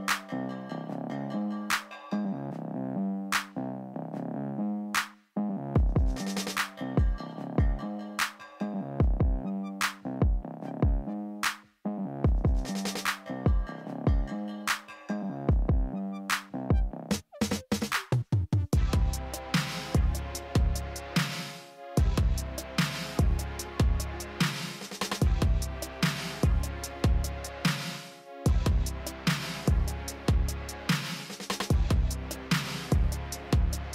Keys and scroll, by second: 2.7 s.